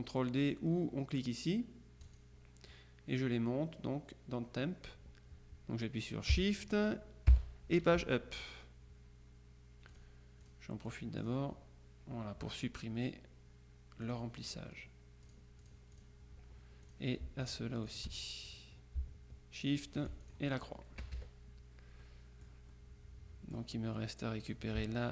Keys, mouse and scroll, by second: 2.1 click, 7.4 shift+Page_Up, 10.0 click, 11.0 click, 14.1 click, 15.3-16.6 drag, 16.9 click, 18.1 shift+click, 19.9-20.9 shift+drag, 21.1 KP_Subtract, 22.1 click, 24.5 click.